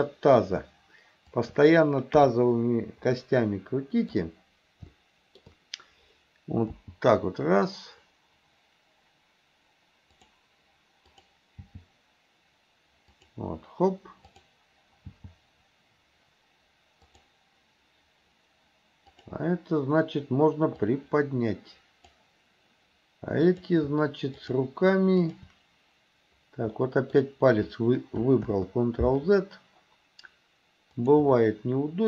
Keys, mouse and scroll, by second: 0.1 middle click, 1.4 shift+click, 2.2 KP_3, 3.1-4.2 middle drag, 5.0-5.5 shift+middle drag, 6.7 g, 11.1 click, 11.7 g, 14.3 click, 15.1 g, 19.2 click, 20.8 click, 21.1-22.2 drag, 23.4 click, 24.4 shift+click, 25.3 shift+click, 26.8 middle click, 28.5 ctrl+z.